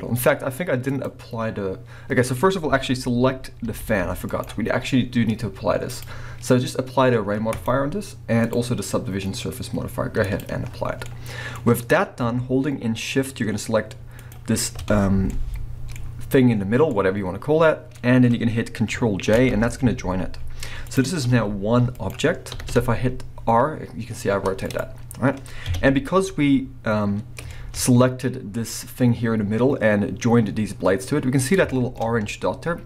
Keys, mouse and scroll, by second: 0.9 click, 3.7 g, 4.4 right click, 5.9 click, 7.5-8.5 drag, 10.2 click, 10.9 scroll down 2, 11.0-14.2 middle drag, 11.6-12.9 scroll up 2, 12.9-14.2 scroll up 1, 14.2 shift+click, 14.3-18.1 middle drag, 16.0-16.9 scroll up 2, 18.0 scroll down 2, 19.4 ctrl+j, 20.3-20.7 scroll down 2, 20.7 middle click, 20.9 click, 21.0-32.8 middle drag, 21.3 g, 22.1 right click, 22.5 r, 24.8 right click, 25.6 KP_1, 26.2 scroll up 1, 28.2 scroll up 3, 31.2 scroll up 1.